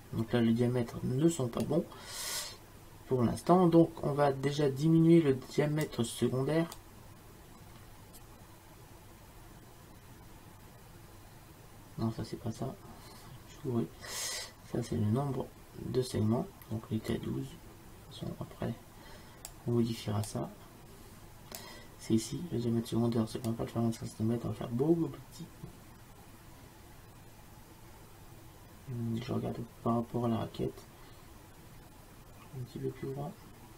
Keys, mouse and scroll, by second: 1.7-3.8 drag, 8.4 click, 20.3-22.3 drag, 23.5-33.7 drag.